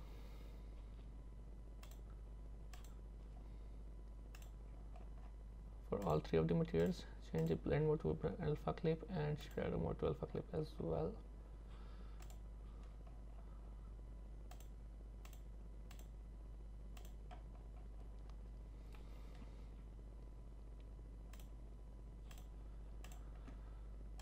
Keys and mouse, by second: 1.9-4.6 drag, 6.1 click, 7.5-9.6 drag, 14.7 click, 16.1-17.1 drag, 21.4-23.2 drag.